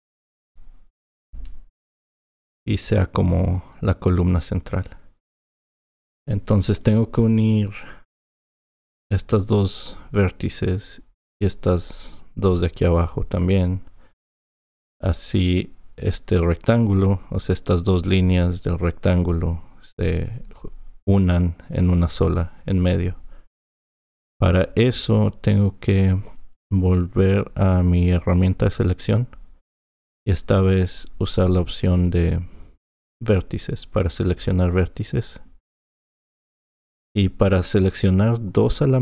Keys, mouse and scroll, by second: 1.9 F7, 28.3-31.4 drag, 32.8-35.9 drag.